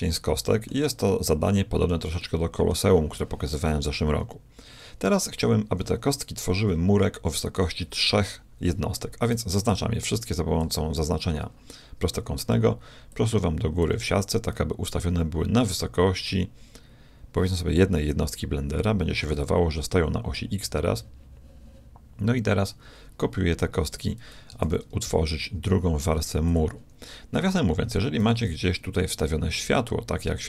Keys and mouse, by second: 6.5 KP_1, 9.3 b, 13.1-14.9 drag, 24.6 shift+d, 28.2 shift+a.